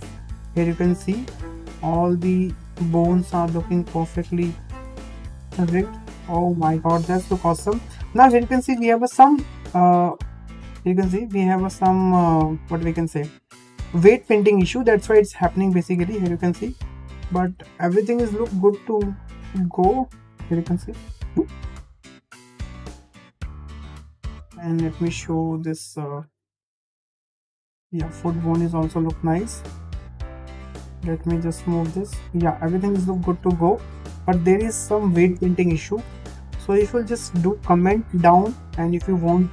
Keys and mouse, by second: 1.2 shift+middle drag, 2.1 middle drag, 2.9 drag, 4.1-4.5 middle drag, 5.3 g, 9.9 g, 14.6 g, 17.4 middle click, 19.4 g, 23.3 shift+middle drag, 24.0 middle drag, 24.4 shift+middle click, 24.9 middle drag, 25.6 click, 26.2 middle click, 26.7 g, 30.8 click, 31.3 g, 34.4 `, 35.5 shift+middle click, 37.0 click, 38.3 g.